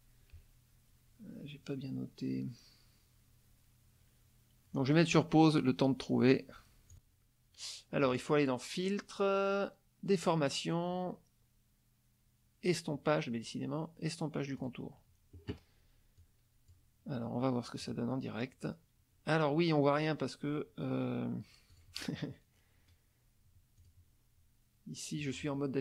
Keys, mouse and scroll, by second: 6.9 click, 8.0 click, 14.6 click, 16.2 click, 17.8 click, 21.7 click, 23.8 click, 25.2 click.